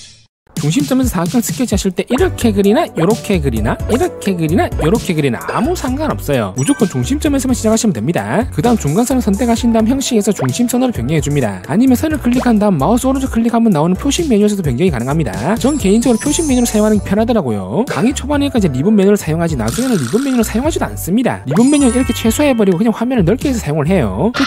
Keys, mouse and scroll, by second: 1.8 click, 9.0 click, 9.8 click, 11.0 click, 11.6 click, 12.0 click, 12.4 right click, 14.4 click, 23.7 click.